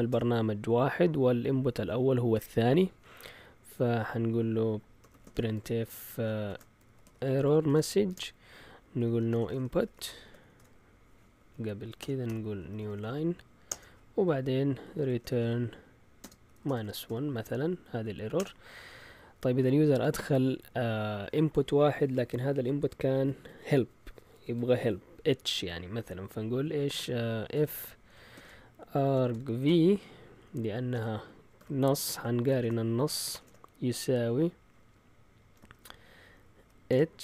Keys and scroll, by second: 0.0-0.6 typing, 4.7-18.8 typing, 12.6 Right, 12.7 Right, 12.9 Right, 13.0 Right, 27.5-29.6 typing, 30.9-31.5 typing, 32.5 shift+Tab, 33.0-33.8 typing, 35.5-37.2 typing.